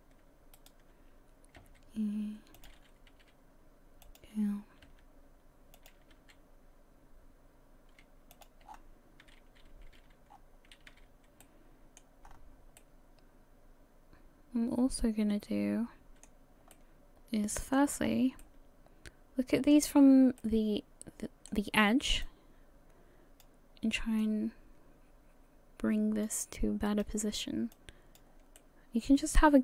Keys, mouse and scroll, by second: 0.5 shift+right click, 1.6 e, 3.1 s, 4.6 s, 4.8 g, 7.8 r, 8.7-9.2 scroll down 7, 9.2 a, 9.7 a, 10.3-10.9 scroll down 2, 10.3 a, 10.9 a, 11.4 middle click, 12.2-12.8 scroll up 5, 12.8 middle click, 16.7 middle click, 18.0 scroll up 3, 18.4 shift+middle click, 20.0-20.4 scroll down 2, 20.4 middle click, 22.2 click, 24.2 click, 26.9 right click, 27.7 click, 28.6 middle click.